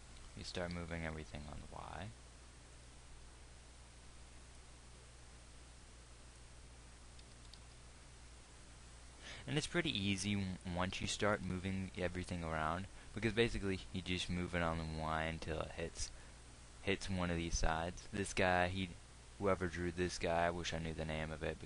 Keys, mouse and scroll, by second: 0.8 g, 8.0 g, 12.0 g, 14.4 g, 17.9 g.